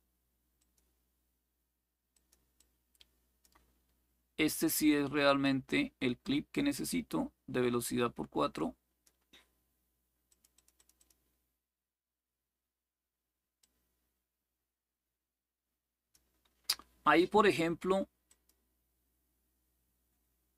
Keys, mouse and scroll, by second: 0.0-0.3 typing, 0.3 click, 1.8 click, 2.3 click, 5.1-8.8 drag, 10.0 click, 13.3-15.9 drag, 18.0 click.